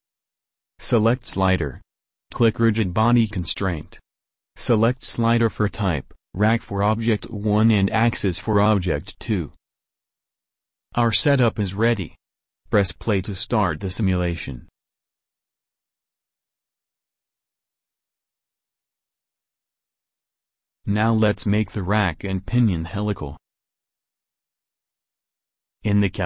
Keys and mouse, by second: 1.0 right click, 1.7 middle click, 12.1 middle click, 12.6 ctrl+x, 25.7 alt+Tab.